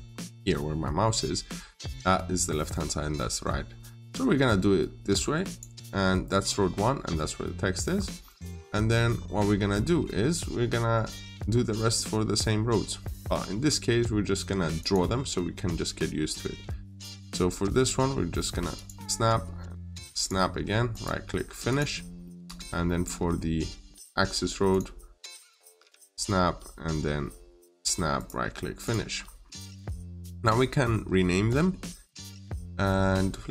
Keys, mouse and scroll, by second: 5.3 click, 6.2-6.6 scroll up 1, 7.7 scroll down 1, 8.4 middle click, 14.6 click, 15.5-16.4 scroll down 1, 16.4 middle click, 16.5 scroll up 1, 18.6 click, 20.7 right click, 21.5 click, 22.1 middle click, 24.5 click, 26.5-27.1 scroll up 1, 27.7 click, 28.0 right click, 28.7 click, 29.0-29.3 scroll down 1, 29.3 middle click, 29.8-30.8 scroll down 2, 29.9 middle click, 31.3 middle click.